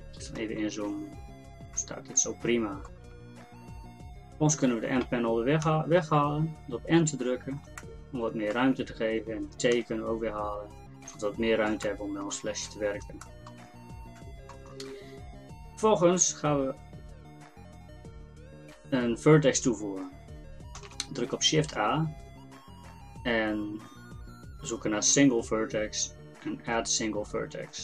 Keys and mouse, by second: 5.7 n, 9.7 t, 13.7-20.8 middle drag, 20.8 shift+a.